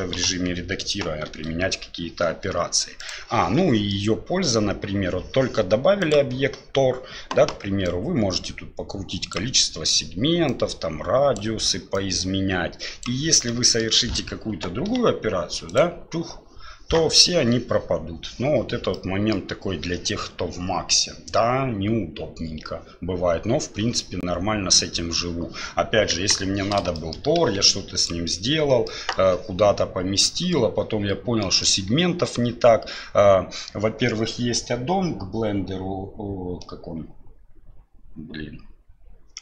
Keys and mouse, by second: 0.1 Delete, 1.3 shift+a, 3.9-4.5 middle drag, 6.0 click, 7.9-9.4 drag, 10.5 click, 11.9-13.0 drag, 13.6 middle click, 14.9 g, 19.0 middle click, 26.1 KP_1, 27.0 shift+middle click, 27.4 g, 28.9 middle drag, 31.4 middle click.